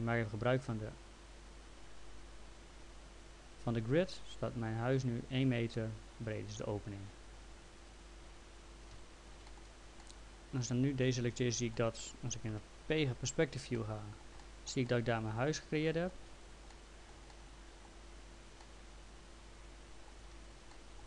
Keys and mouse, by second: 7.9 click, 8.9 F3, 9.5 middle click, 10.0 alt+middle click, 12.5 p, 13.8 alt+middle click, 14.9 alt+middle click, 16.6 middle click, 17.3 alt+middle click, 18.6 alt+middle click, 20.7 middle click.